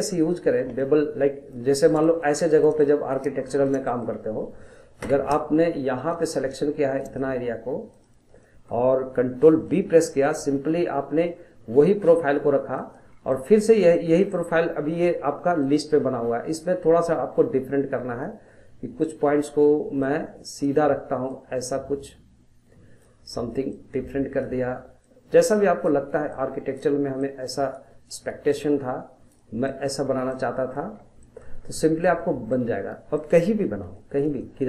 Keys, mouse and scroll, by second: 5.0 Tab, 6.0 click, 7.0 shift+click, 7.9 shift+click, 8.4-9.7 middle drag, 9.7 ctrl+b, 13.1 scroll down 2, 13.3 middle click, 13.7 scroll up 2, 13.9-15.6 middle drag, 15.6-18.7 drag, 20.0-29.7 drag, 29.7 middle click, 30.0 scroll down 1, 30.3 middle click, 30.9 scroll down 1, 31.2 middle click, 31.6-32.1 scroll up 1, 32.1-33.6 shift+middle drag, 33.6-34.0 scroll up 1, 34.0 shift+middle click.